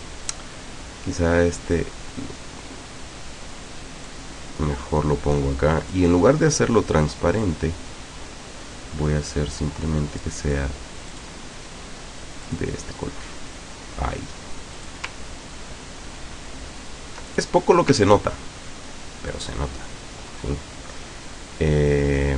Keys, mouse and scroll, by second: 4.1-6.2 drag, 7.4 click, 11.2 click, 12.5 click, 14.8 click, 15.3-15.8 ctrl+scroll down 2, 17.3 ctrl+click, 18.0 ctrl+scroll down 2, 19.4 ctrl+click, 20.3-20.8 ctrl+scroll up 2, 21.7 ctrl+scroll up 2.